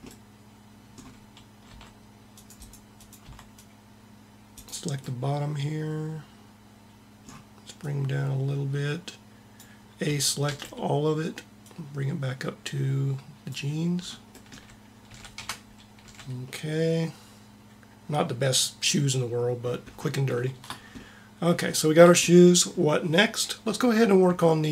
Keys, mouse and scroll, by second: 1.5 c, 2.3 c, 3.1 c, 3.3 c, 7.6-9.4 drag, 10.0 a, 10.3 a, 11.6-13.3 drag, 15.0 a, 15.1 Tab, 15.8 a.